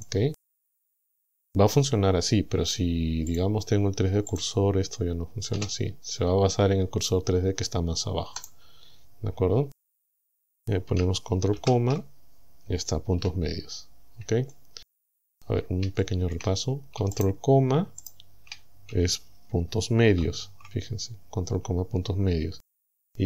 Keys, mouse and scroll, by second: 0.0 click, 3.3 click, 4.3 click, 5.6 s, 8.5 right click, 11.6 ctrl+,, 13.2 a, 13.6-14.3 scroll down 2, 14.5 shift+middle click, 14.7 shift+click, 15.5-15.8 scroll up 2, 16.0 shift+click, 17.2 shift+right click, 18.1 shift+right click, 20.2 ctrl+,.